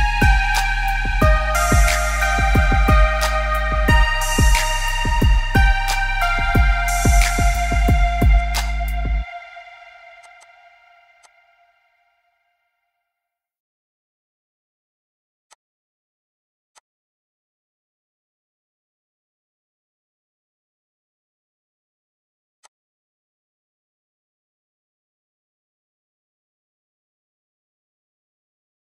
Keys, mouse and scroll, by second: 23.9 scroll up 2, 24.1 middle click.